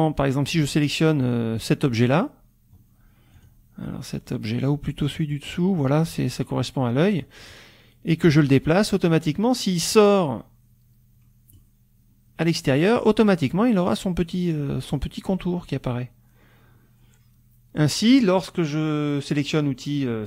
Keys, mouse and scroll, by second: 1.2 click, 2.5 scroll down 1, 3.4 click, 3.9 middle click, 5.2 click, 6.8 middle click, 8.2-11.7 drag, 14.9-18.0 drag.